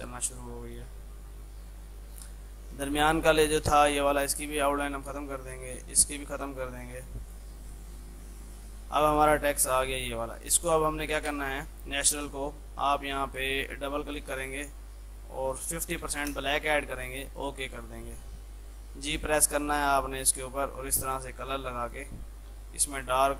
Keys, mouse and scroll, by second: 0.7 click, 2.7 click, 3.5 ctrl+z, 4.7 right click, 5.4 click, 6.2 right click, 6.6 click, 7.7 ctrl+z, 9.2 click, 11.0 shift+F2, 11.2 F3, 13.2 click, 16.5 shift+Tab, 17.2 click, 18.8 g, 19.3-23.3 drag.